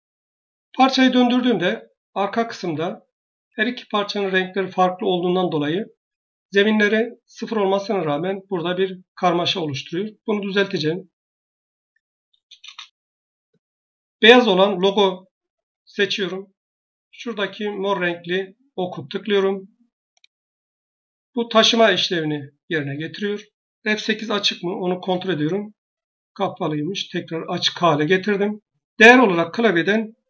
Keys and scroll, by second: 12.4 Return, 24.1 F8, 24.9 F8, 30.1 1.